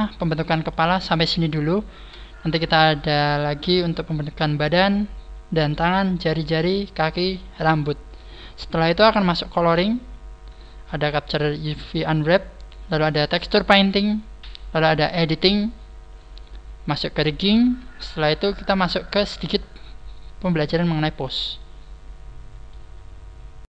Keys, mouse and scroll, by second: 2.5 shift+middle click, 19.0 shift+middle click, 19.6 scroll up 1, 20.3-20.7 scroll down 2, 20.9 shift+middle click, 21.4 shift+middle click.